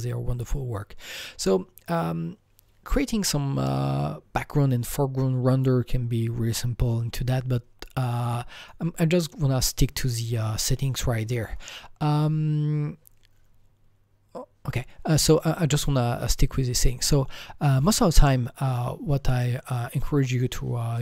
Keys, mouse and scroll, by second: 8.1 click, 8.1 scroll down 1, 8.6 click, 18.6 click, 18.6 scroll down 1, 18.7 click, 19.3 click, 20.3 click, 20.4 click.